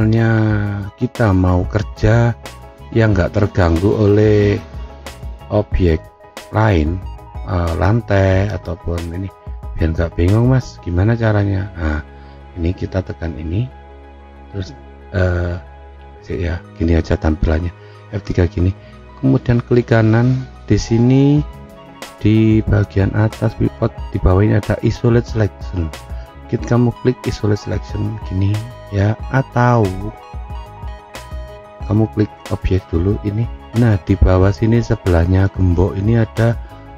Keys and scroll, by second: 16.2 F3.